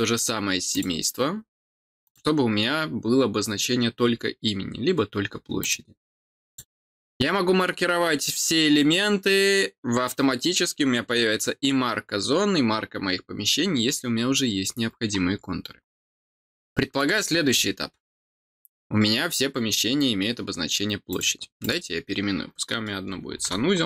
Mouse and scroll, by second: 0.7 click, 2.0 click, 5.6 click, 6.4 click, 7.7-8.1 scroll down 2, 16.6 middle click, 19.1-21.1 scroll down 1, 21.1 click, 21.6 click.